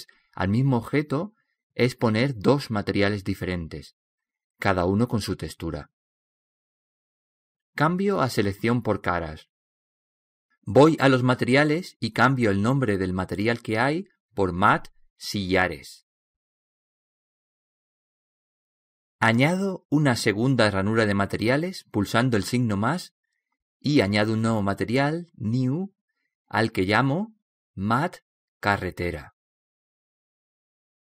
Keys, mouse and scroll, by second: 10.3-12.1 drag, 12.2-15.4 drag, 21.7-23.7 drag, 23.9-28.1 drag.